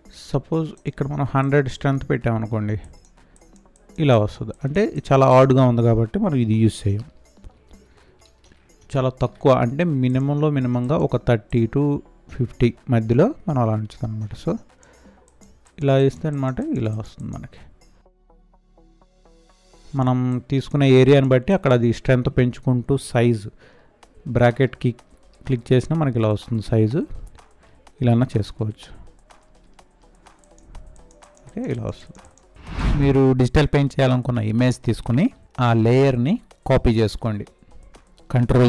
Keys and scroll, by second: 6.4 ctrl+z, 19.5 space, 32.5 space.